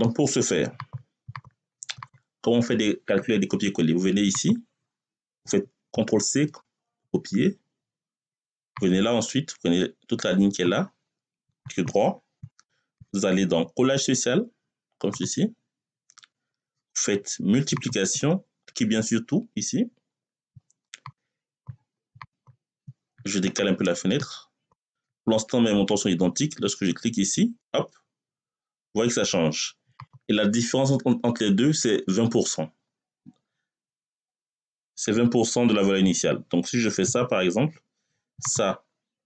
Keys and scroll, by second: 5.8 ctrl+c, 36.9 =.